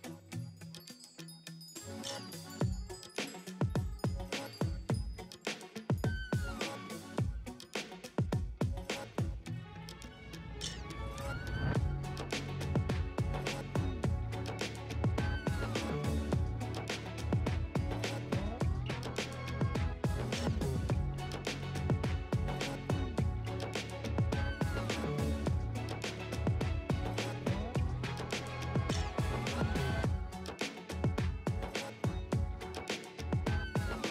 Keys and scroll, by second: 6.4 [, 9.0 ctrl+space, 9.1 ctrl+space, 10.2 [, 14.3 2, 20.4 space, 21.8 ], 24.5 space, 24.9 space, 28.6 space, 29.8 space, 33.3 space, 33.6 space.